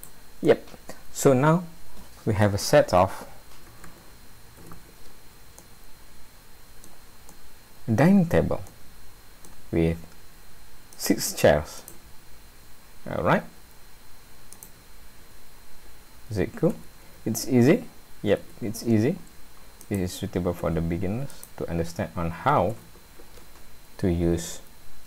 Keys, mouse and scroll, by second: 0.5 middle click, 3.0 a, 3.7 a, 4.6 alt+a, 5.6 middle click, 7.3 middle click, 8.7 middle click, 9.7 scroll up 1, 10.9 click, 11.8 shift+click, 14.5 click, 16.7 a, 18.4 alt+a, 19.3 scroll down 1, 19.8 click, 20.6 s, 22.7 alt+a.